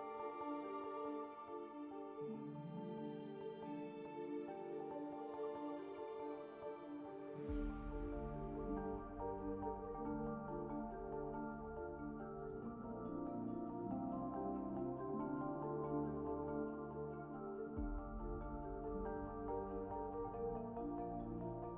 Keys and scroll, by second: 10.8 alt+s, 11.7 1, 12.9 ctrl+1.